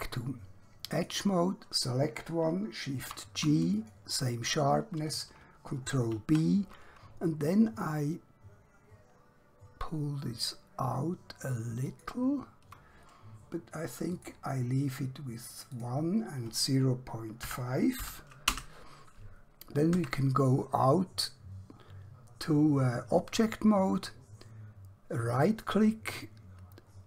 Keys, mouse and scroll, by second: 0.9 click, 3.1 g, 3.7 click, 6.0 b, 11.8 click, 14.2 click, 17.4 ., 18.6 Return, 20.0 Tab, 20.9 scroll down 1, 21.7-23.2 scroll up 1, 25.3 right click.